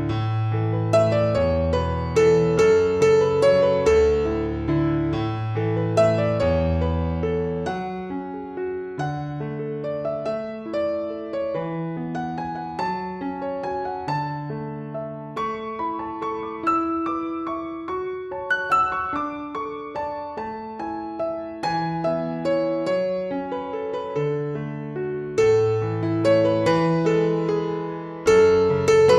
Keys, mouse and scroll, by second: 0.6 click, 9.0 KP_4, 9.3 KP_0, 10.9 Tab, 11.3 KP_4, 11.6 KP_0, 13.5 click, 16.2 click, 17.9 t, 18.9 click, 21.1 click, 22.7 click, 25.1 click, 26.5 click, 28.5 shift+click.